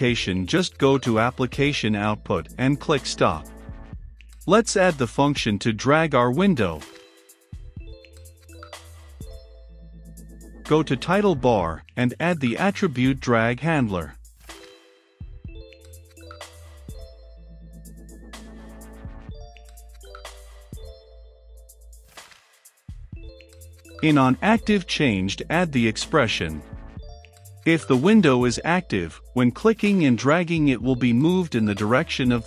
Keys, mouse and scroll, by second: 7.4 middle click, 7.9-9.3 drag, 9.3 middle click, 9.6 click, 10.1 Return, 10.4-13.0 drag, 12.9-14.1 typing, 15.7-18.1 typing, 16.7 Return, 18.5 Return, 23.1-24.5 typing, 24.5 Down, 25.8 Return, 26.2-31.0 typing, 28.9 Return, 32.1 Return.